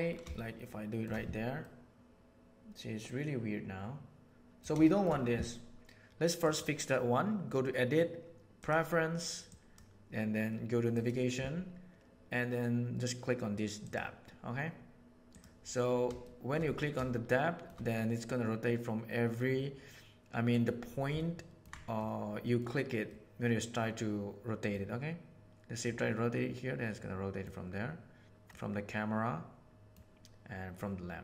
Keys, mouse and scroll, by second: 0.3 shift+middle click, 1.6-4.5 middle drag, 4.8 shift+middle drag, 6.5-8.7 drag, 16.2 shift+middle drag, 17.2-17.6 shift+middle drag, 18.2-20.6 middle drag, 21.1-21.5 ctrl+middle drag, 21.9-22.5 middle drag, 23.0-24.7 middle drag, 25.8-27.4 middle drag, 28.4-29.9 middle drag, 30.8-31.2 middle drag.